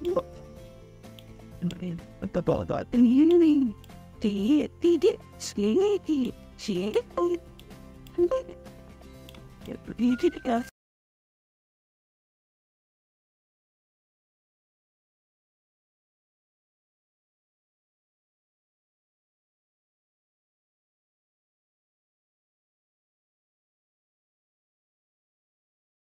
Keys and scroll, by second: 23.0 ctrl+=.